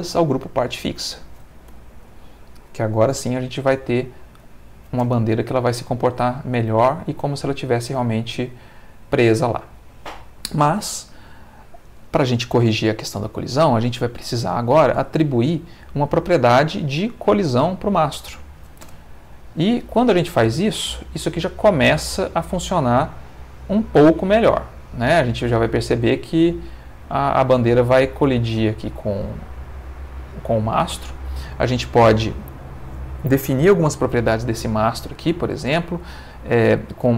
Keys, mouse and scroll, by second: 0.7 click, 1.7 Tab, 2.4 ctrl+middle click, 3.1 ctrl+z, 4.4 click, 5.0 space, 11.9 Escape, 13.3 click, 16.3 click, 17.6 click, 18.8 space, 30.7 Escape.